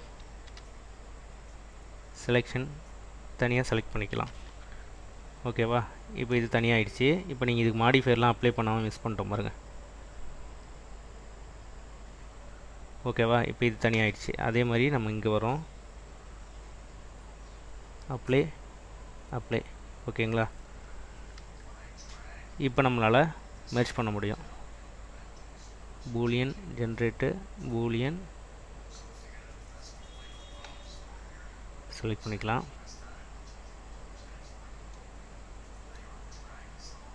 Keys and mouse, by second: 0.6 p, 4.4 Tab, 8.1-8.7 drag, 11.5-12.2 drag, 12.6 click, 14.7 click, 17.4-18.1 drag, 18.8-19.3 drag, 19.9 click, 21.6 /, 22.4 click, 23.3 click, 24.0 click, 25.8-27.8 drag.